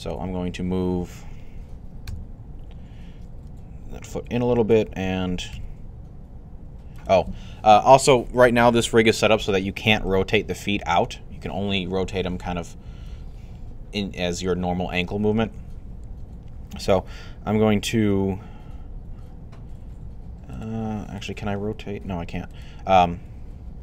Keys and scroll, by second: 1.9 typing, 3.3 typing, 5.4 typing.